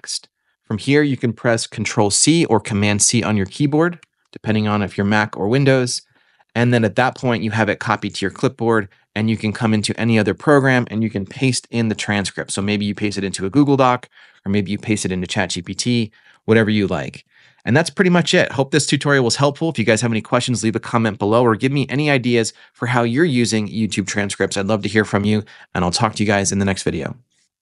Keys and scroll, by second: 3.9 super+c, 11.2 super+v, 13.0 shift+Home, 15.4-17.0 typing.